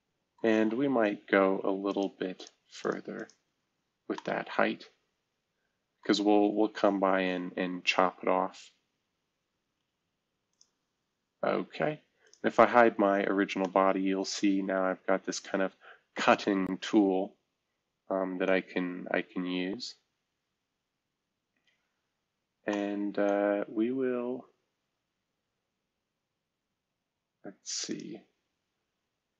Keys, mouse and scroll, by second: 1.8 click, 2.3 click, 2.8 click, 3.7-5.0 scroll down 1, 4.1-5.2 middle drag, 6.3-7.2 scroll up 2, 12.2 click, 12.4 space, 13.3 middle click, 13.6 middle click, 19.1-19.5 scroll down 1, 19.9-20.5 scroll up 2, 20.5-21.0 scroll up 1, 21.0-22.5 scroll down 2, 22.6 middle click, 23.4-24.2 scroll down 2, 24.2-25.0 scroll up 2, 27.8 click.